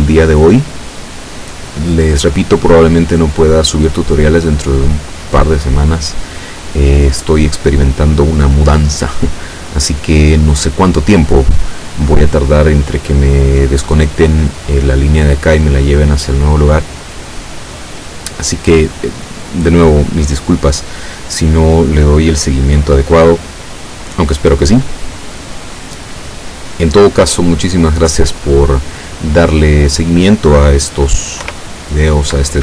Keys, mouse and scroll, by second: 31.5 p.